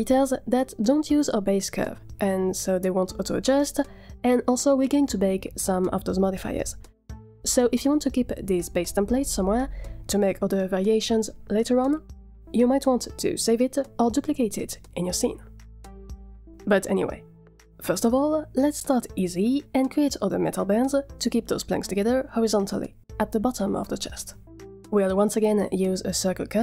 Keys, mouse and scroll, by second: 23.8 middle click.